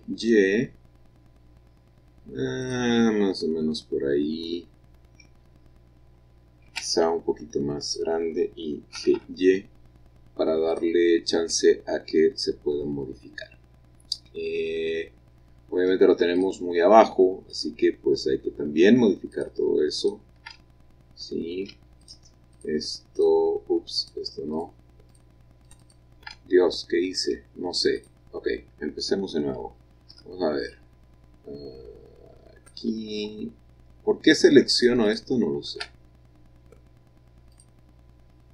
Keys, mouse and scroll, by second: 2.5 click, 2.8-5.7 middle drag, 6.6 s, 7.0 y, 7.8 click, 8.9 g, 10.6 click, 11.1 middle click, 11.5 click, 11.8-12.3 scroll up 2, 12.3 scroll down 2, 12.5-13.8 middle drag, 14.3-16.3 middle drag, 14.3 scroll up 2, 14.4-16.3 scroll down 2, 16.3 shift+click, 17.5 shift+click, 19.3 shift+click, 19.9 shift+click, 20.5 shift+click, 22.0 shift+click, 22.5 shift+click, 23.1 shift+click, 24.0 shift+click, 24.5 shift+click, 25.1 shift+click, 25.6 shift+click, 26.3 middle click, 27.8 scroll down 1, 27.9 click, 30.0 b, 30.6-32.7 drag, 33.8-34.7 scroll down 2, 34.7 shift+click, 35.0-36.4 shift+drag, 37.5 click, 38.4-38.5 scroll up 1.